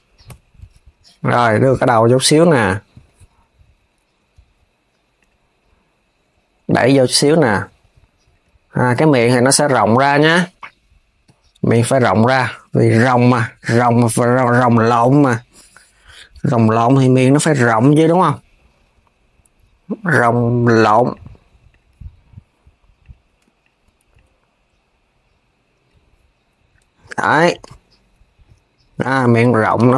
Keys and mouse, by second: 1.0 click, 3.8 Tab, 4.8 click, 6.3 click, 8.4 click, 10.9 click, 13.4 click, 17.2 shift+click, 17.9 click, 20.8-22.8 drag, 23.3 shift+click, 23.8 click, 26.5 KP_3, 28.6 click, 29.1 shift+click, 29.4 KP_3.